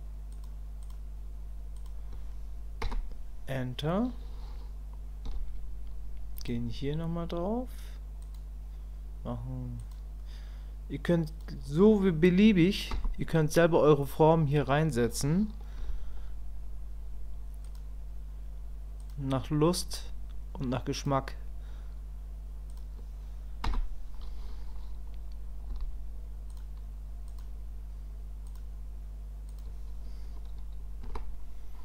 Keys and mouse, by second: 15.8 k.